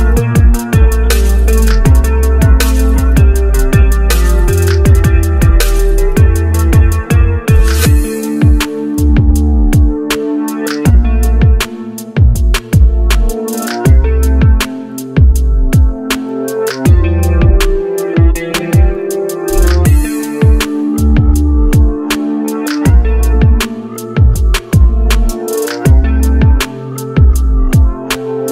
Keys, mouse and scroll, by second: 17.8 double click, 19.7 right click, 21.8-22.7 scroll down 1, 27.5 scroll up 1.